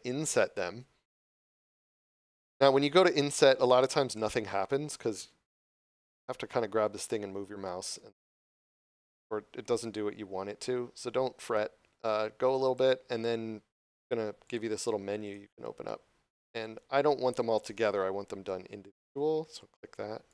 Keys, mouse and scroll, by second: 1.9 click, 7.8 click.